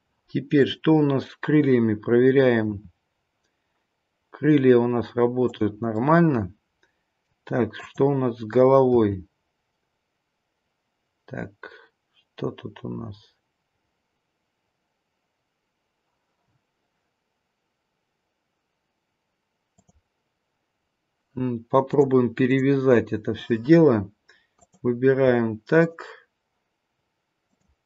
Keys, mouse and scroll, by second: 0.5 click, 2.8 r, 5.9 middle click, 7.7 click, 8.9 r, 21.8 click, 23.6-24.5 scroll up 2, 24.5 click, 25.7 shift+click, 27.3 click.